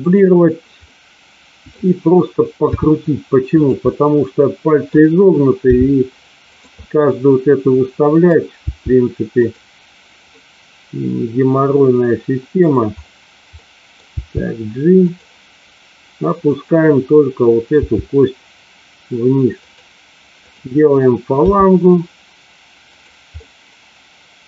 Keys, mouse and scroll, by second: 0.8-1.8 middle drag, 2.7 r, 3.4 click, 3.9-4.9 middle drag, 6.4 click, 6.4 g, 6.8-8.3 middle drag, 9.3 click, 10.4-12.5 middle drag, 13.5 middle click, 14.2 g, 14.9 click, 17.8 g, 19.5 click, 20.4 click, 21.4 g, 22.8 click, 23.3-24.4 middle drag.